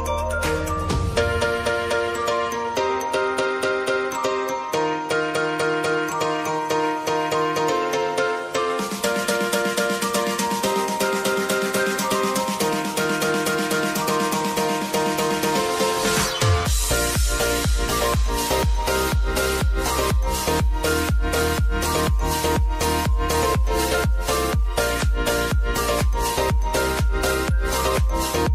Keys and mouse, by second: 0.2 F9, 0.9 j, 1.2 space, 3.9 click, 5.7 =, 6.6-8.2 drag, 8.2-10.1 drag, 10.8 space, 12.5 click, 13.0 space, 15.3-16.9 drag, 16.9 space, 19.0 click, 19.4 -, 20.1 click, 20.4 space, 24.9 space, 26.6 click.